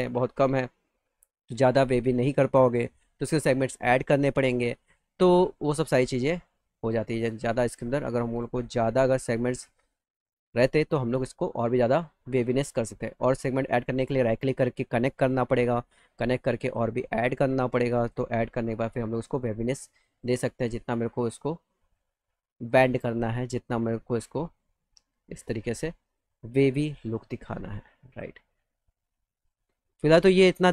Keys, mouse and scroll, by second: 0.5 middle click, 0.7 middle click, 1.0 middle click, 1.5 click, 1.9 scroll up 2, 2.9 click, 4.1 middle click, 4.8 click, 5.4 middle click, 6.4 click, 7.7 click, 8.5 click, 9.9 alt+middle click, 11.8 click, 12.2 middle click, 13.0 click, 13.6 right click, 15.0 click, 16.5 click, 16.7 click, 17.0 click, 17.9 click, 19.1 click, 19.8 click, 20.4 middle click, 21.8 click, 23.3 click, 24.4 click, 25.5 middle click, 26.4 click, 27.5 click, 29.5 click, 30.4 click.